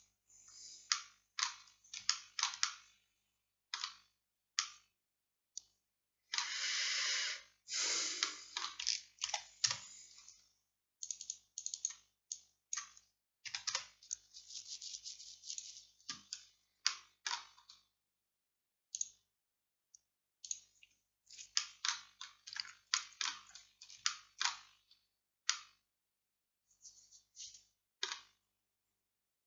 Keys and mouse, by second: 1.0-11.1 drag, 9.3 shift+d, 16.9-21.6 middle drag, 22.6 Tab.